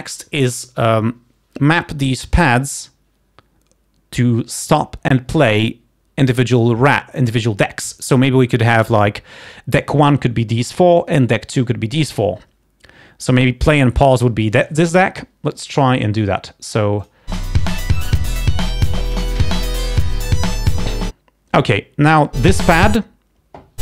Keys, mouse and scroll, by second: 17.2-19.2 drag.